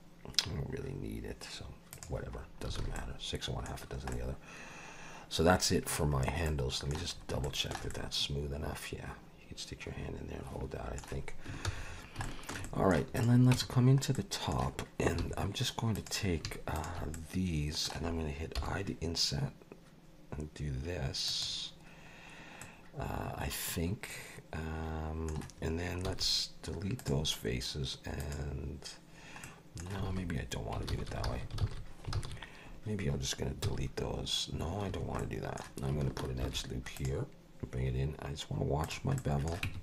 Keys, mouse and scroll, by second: 1.9 click, 2.4-2.7 scroll down 3, 2.8 alt+a, 3.0 middle click, 3.8 scroll down 2, 4.1 middle click, 6.2-6.5 scroll up 3, 6.5 middle click, 7.1-7.4 scroll up 2, 7.4 shift+middle click, 7.9 middle click, 11.7 ctrl+s, 11.8-12.2 scroll down 4, 12.2 shift+middle click, 12.6 middle click, 13.1 click, 13.5 Tab, 14.1 middle click, 15.2 3, 15.9 click, 16.7 shift+click, 17.1 middle click, 18.6 i, 22.6 middle click, 26.1 x, 28.2 click, 29.4 middle click, 30.1 alt+a, 30.9 ctrl+z, 31.3 ctrl+z, 31.6 ctrl+z, 32.2 ctrl+z, 33.6 x, 35.2 middle click, 36.4 ctrl+r, 39.2 middle click, 39.7 Tab.